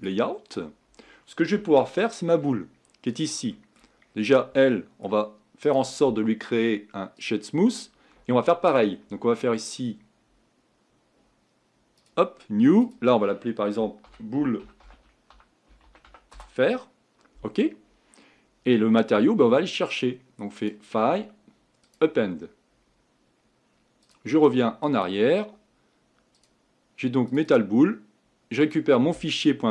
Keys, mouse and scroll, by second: 0.0 click, 0.5-1.8 scroll down 8, 1.8-3.2 shift+middle drag, 3.2 click, 3.5 shift+middle click, 4.0-4.6 scroll up 7, 4.6-7.2 shift+middle drag, 7.2-12.1 right drag, 12.1-16.3 drag, 22.0-29.7 drag.